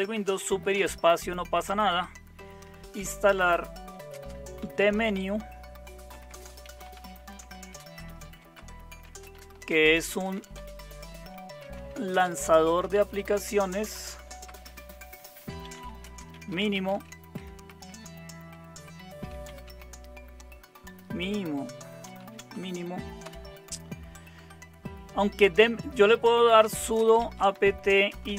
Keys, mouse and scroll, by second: 0.7 super+space, 2.7-23.2 typing, 26.3-28.3 typing.